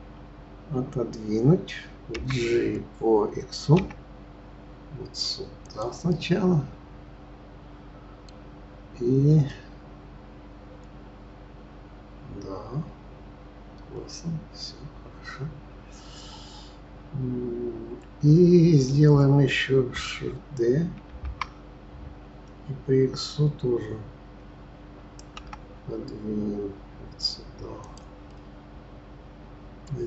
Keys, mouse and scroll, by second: 2.1 g, 6.0-9.1 middle drag, 9.5-12.5 middle drag, 21.1 shift+d, 28.3-30.0 middle drag.